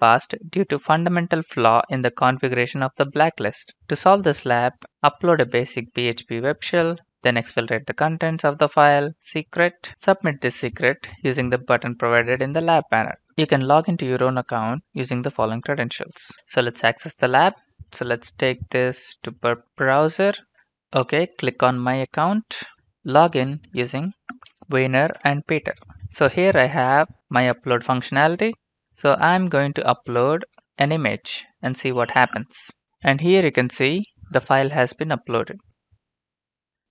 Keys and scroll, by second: 17.8 ctrl+c, 20.3 ctrl+v, 23.8-24.9 typing, 25.1 Return.